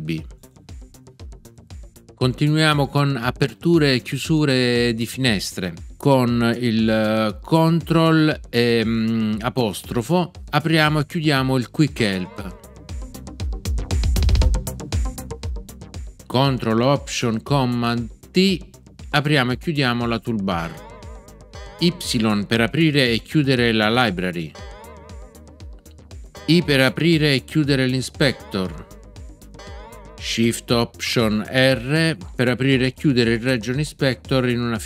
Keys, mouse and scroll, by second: 11.9 ctrl+', 20.5 ctrl+alt+super+t, 24.5 y, 28.2 i.